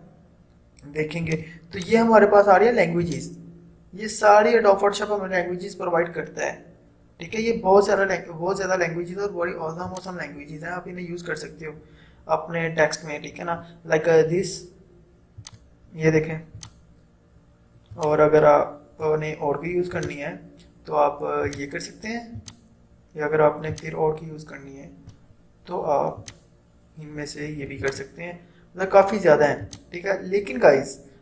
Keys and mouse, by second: 10.0-26.2 drag.